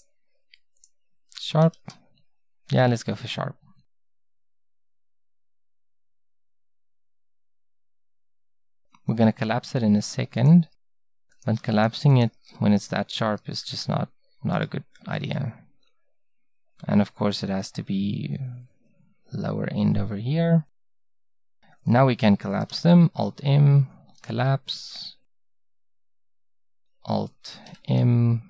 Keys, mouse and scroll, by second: 1.4 s, 11.4-14.6 drag, 13.2 s, 22.7 alt+m, 25.3 click, 27.7-28.4 middle drag.